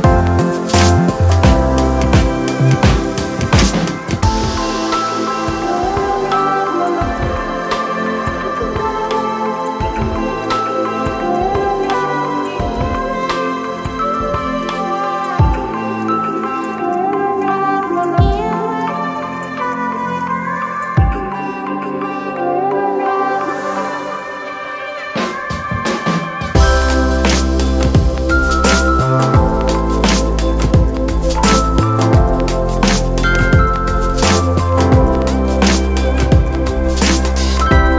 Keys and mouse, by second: 3.3-6.4 drag, 8.2-13.6 drag, 17.0-24.3 drag, 24.3 click, 25.5-28.1 drag, 28.1-29.4 drag, 29.4-36.3 drag, 36.3 click.